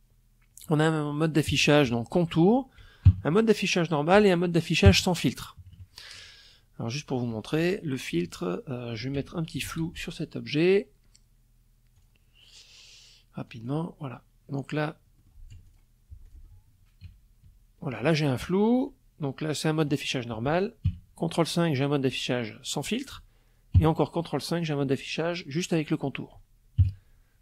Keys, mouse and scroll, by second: 0.0 ctrl+KP_5, 1.6 ctrl+KP_5, 3.4 ctrl+KP_5, 4.1 ctrl+KP_Subtract, 5.7 click, 6.3-7.7 drag, 8.2 ctrl+shift+f, 10.5 click, 12.0 click, 13.7 click, 14.1 F1, 14.2 click, 14.8 ctrl+click, 15.6 ctrl+KP_5, 19.4 ctrl+KP_5, 22.3 ctrl+KP_5, 25.3 ctrl+KP_5.